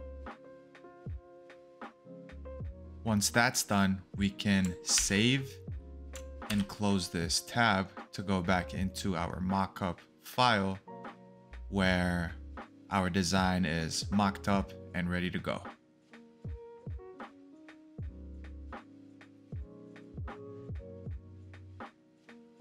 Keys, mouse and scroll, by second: 0.8-1.3 scroll, 1.3-2.8 scroll up 1, 4.6 Return, 4.9 ctrl+s, 6.4 ctrl+w.